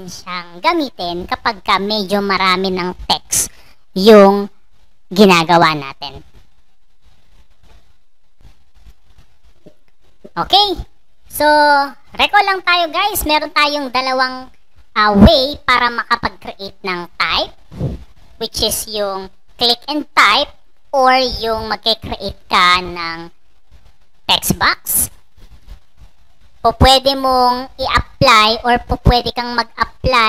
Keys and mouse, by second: 8.2 click, 29.9 click.